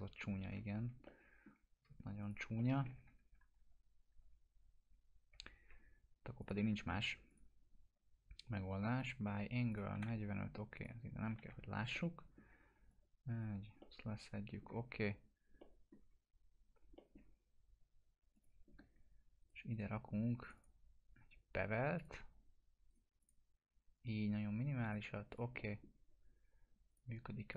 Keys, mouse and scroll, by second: 0.8 F4, 1.0-1.7 middle click, 2.2 click, 2.5 middle click, 3.0 ctrl+z, 6.4 click, 11.5 F2, 11.9-12.5 alt+middle click, 12.5 scroll down 1, 12.9-13.5 alt+click, 13.8-14.7 alt+middle click, 14.9-15.4 scroll up 1, 15.6 alt+middle click, 16.4 scroll up 1, 16.9 middle click, 18.3 click, 19.4 right click, 20.4 click, 21.6 right click, 21.9 click, 22.9 right click, 23.2 click, 25.6 middle click, 25.9 scroll down 1, 26.9 click.